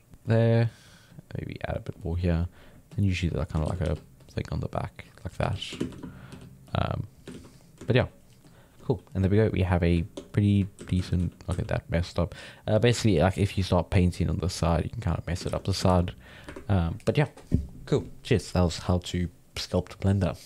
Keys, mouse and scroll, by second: 0.2 middle click, 1.1 click, 2.0 middle click, 2.9 click, 3.6 shift+c, 3.8 f, 4.2-5.4 drag, 5.4 f, 5.8 shift+space, 6.3 f, 6.7 click, 7.3 ctrl+z, 7.5-8.9 drag, 8.9-10.0 middle drag, 10.0 ctrl+Tab, 10.3 middle click, 10.7 ctrl+z, 10.9 ctrl+z, 11.2 ctrl+z, 11.5 ctrl+z, 12.0-13.6 middle drag, 13.6 click, 14.3-15.4 middle drag, 15.4 ctrl+z, 15.9 ctrl+s.